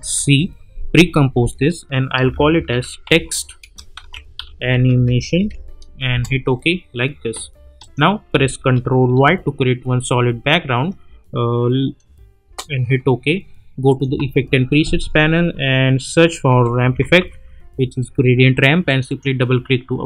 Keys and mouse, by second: 0.3 ctrl+shift+c, 2.4-6.0 typing, 6.1 Return, 7.8 click, 9.0 ctrl+y, 12.4 Return, 13.9 click, 14.1 ctrl+a, 16.2-17.6 typing, 18.8 click.